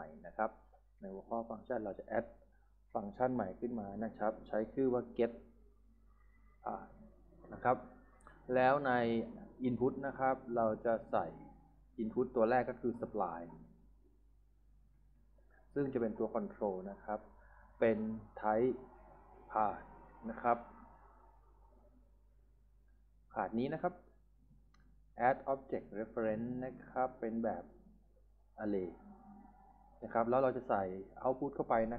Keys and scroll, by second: 4.8-7.1 typing, 14.0-15.6 typing, 19.0-20.1 typing.